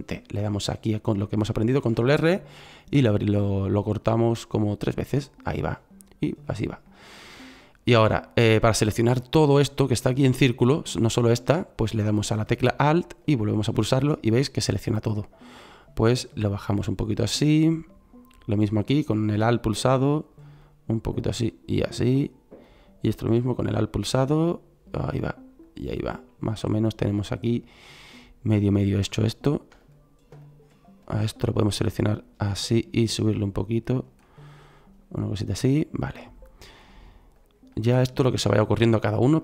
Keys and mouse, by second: 1.7 ctrl+r, 9.0 middle click, 10.0 middle click, 10.3 middle click, 27.3 middle click, 27.8 middle click, 28.0 middle click, 28.7 click, 34.2 click, 37.7 click, 38.7-39.4 drag.